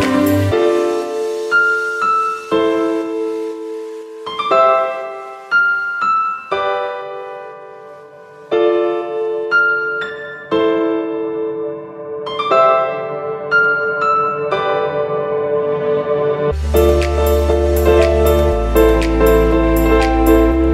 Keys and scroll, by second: 0.6 v, 3.6 v, 16.2 z, 18.0 super+y, 18.4 v.